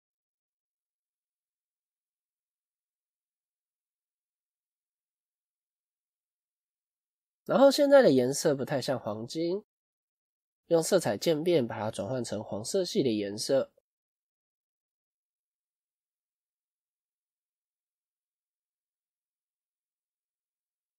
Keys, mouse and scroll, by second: 6.7 click.